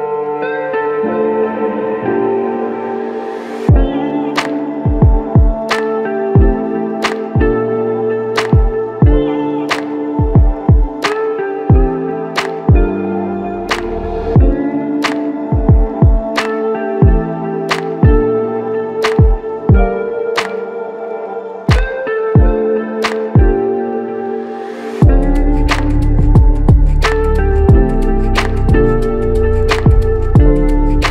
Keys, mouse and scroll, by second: 3.0 alt+click, 8.7 alt+shift+click, 15.4 alt+shift+click, 20.0 alt+shift+click, 26.0 alt+click.